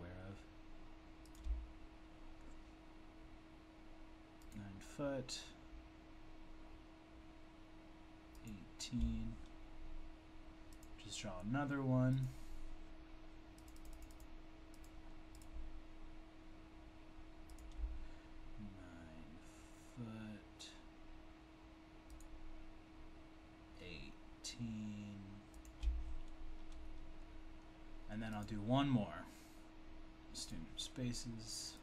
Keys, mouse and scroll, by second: 0.7 click, 1.3 click, 4.5 shift+click, 14.8 click, 17.5 click, 22.2 shift+click, 25.5 shift+double click, 25.6 shift+double click, 28.4 click, 30.5 click.